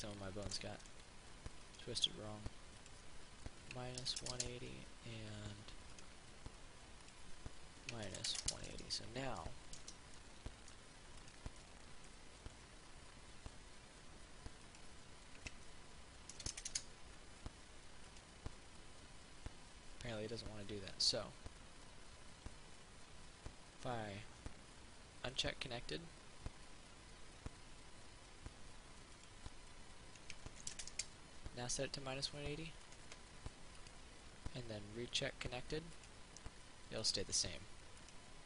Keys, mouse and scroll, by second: 1.9 right click, 3.1 click, 4.3 KP_1, 6.1 right click, 7.3 click, 8.4 KP_1, 10.0 Tab, 10.4 middle click, 11.5 right click, 11.8 middle click, 12.6 middle click, 14.9 click, 16.5 KP_1, 18.3 right click, 25.5 click, 30.7 KP_1, 33.1 right click, 35.3 click, 36.2 right click.